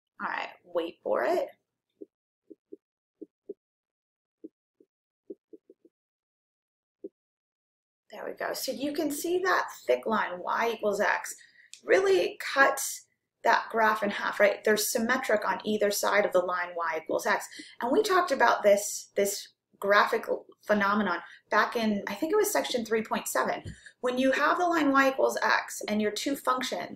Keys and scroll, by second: 0.2-0.9 typing.